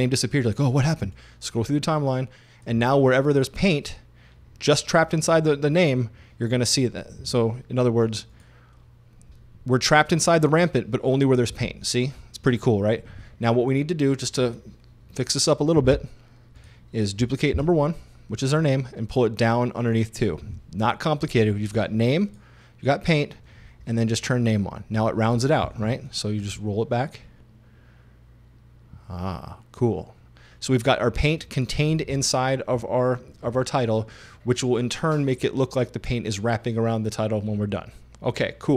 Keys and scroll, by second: 17.6 super+d.